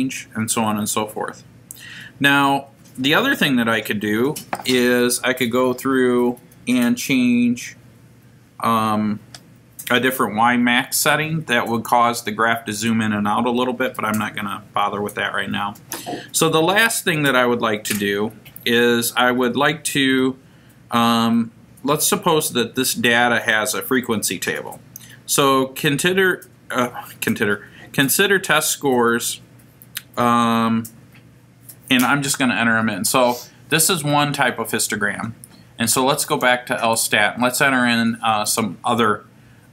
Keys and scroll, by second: 38.5 Return.